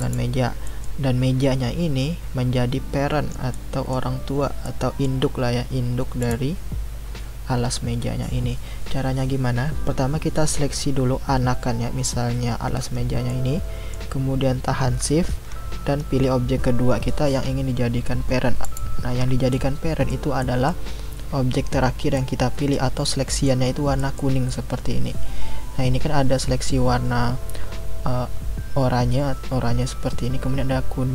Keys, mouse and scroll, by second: 0.0 click, 0.6-6.2 middle drag, 6.2 click, 13.3-16.3 middle drag, 18.6 shift+click, 19.5-26.7 middle drag, 26.7-28.0 scroll up 3, 28.0-30.4 scroll down 1.